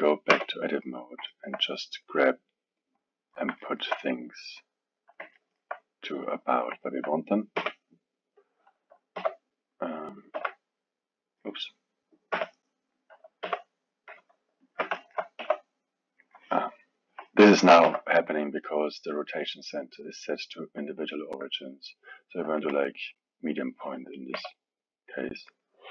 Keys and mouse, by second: 0.3 Tab, 1.0 click, 1.3 alt+middle click, 2.2-3.6 drag, 3.6 alt+middle click, 4.3 click, 5.4 alt+middle click, 6.3 click, 6.8-7.5 alt+middle drag, 7.5 b, 9.1 f, 10.4 g, 12.3 b, 13.4 g, 15.0 alt+middle click, 15.4 r, 17.8 r, 19.7-22.9 drag, 24.3 r.